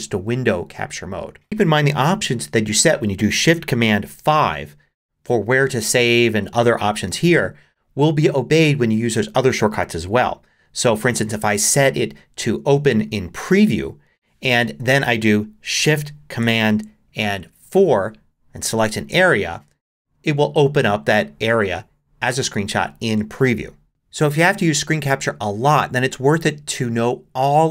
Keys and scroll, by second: 4.1 shift+super+5, 14.5 Escape, 17.6 shift+super+4.